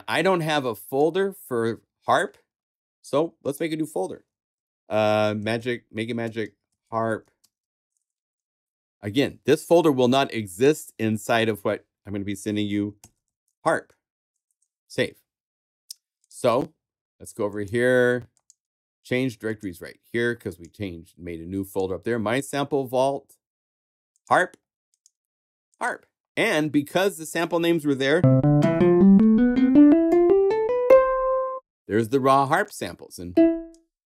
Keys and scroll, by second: 5.4-8.1 typing, 12.7-13.9 typing, 14.4 Return.